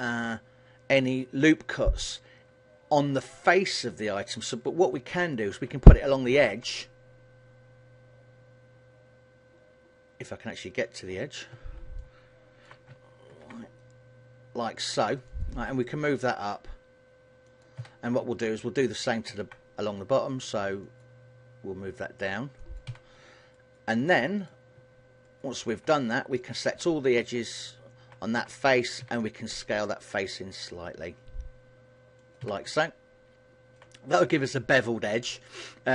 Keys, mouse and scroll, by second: 4.8 middle click, 6.3 ctrl+r, 12.2 middle click, 13.5 ctrl+r, 17.7 click, 17.9 a, 19.4 ctrl+r, 22.8 click, 23.0 a, 23.7 alt+right click, 24.1 middle click, 25.3 alt+shift+right click, 26.3 shift+middle click, 27.5 alt+shift+right click, 29.2 s, 32.5 click, 32.7 a, 32.9 middle click, 34.3 scroll up 3, 34.7 middle click.